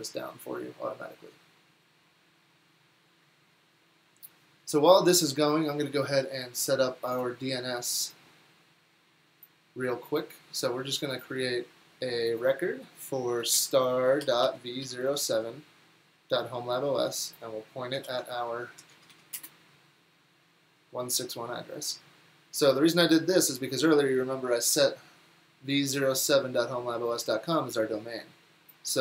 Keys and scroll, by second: 9.4-10.1 typing, 14.3-15.7 typing, 18.2 alt+c, 18.9 Down, 19.1 Down, 19.4 Return.